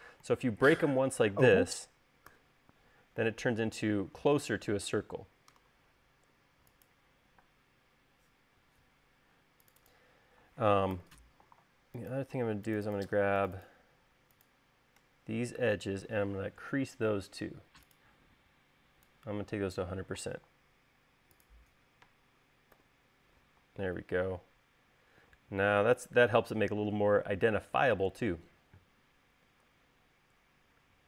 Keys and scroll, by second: 2.5 u, 7.5 space, 8.7 Escape, 8.9 Escape, 11.1 u, 22.3-23.0 typing.